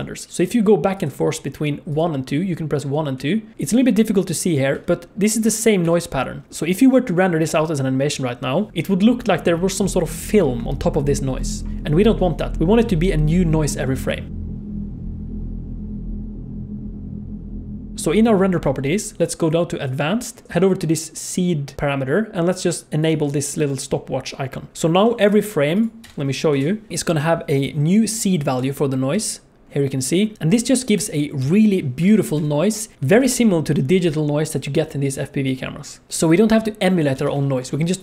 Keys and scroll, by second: 25.0 F11, 33.2 ctrl+s, 37.2 ctrl+s.